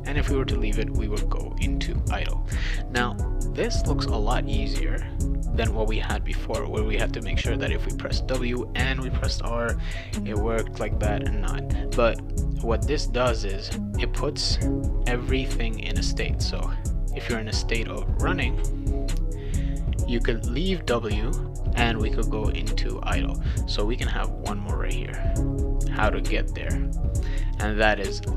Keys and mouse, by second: 12.6 click, 13.0-14.3 drag, 14.9 click, 15.2 click, 16.6 click, 16.9 click, 18.1 click, 18.4 click, 23.6 click, 24.8 click, 26.1 click.